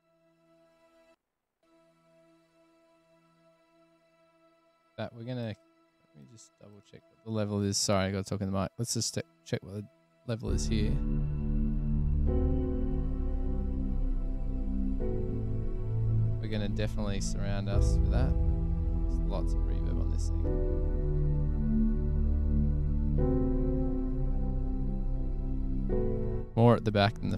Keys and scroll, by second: 0.0 super+[, 1.3 space, 1.8 space, 2.7 F8, 10.7 s, 14.8 super+=.